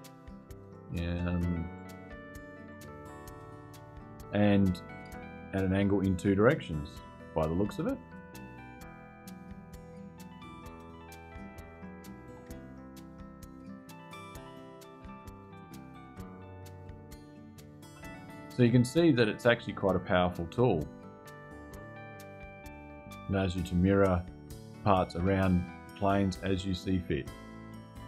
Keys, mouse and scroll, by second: 1.5 click, 2.4 click, 4.3-11.7 middle drag, 13.2 click, 13.8 click, 16.5 click, 17.6 space, 18.8-20.1 drag.